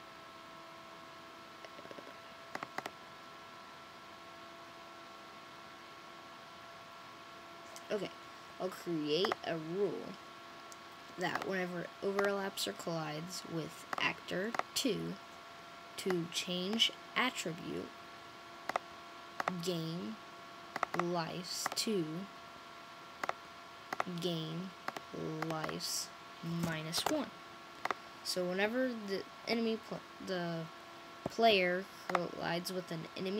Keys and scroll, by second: 26.5-26.8 typing, 29.4-30.2 typing.